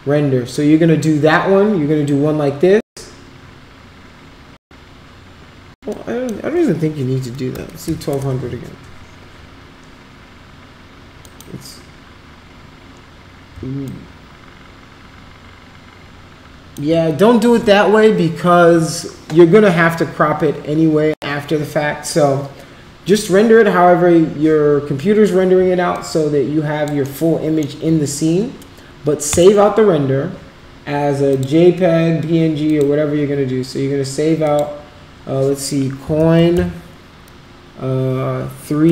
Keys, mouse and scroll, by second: 6.0 click, 7.5 2, 7.9 0, 11.3 click, 13.8-16.7 alt+drag, 25.9 alt+click, 27.2 alt+middle click, 29.4 click, 31.3 click, 32.7 click, 34.4 click, 35.8-36.7 typing.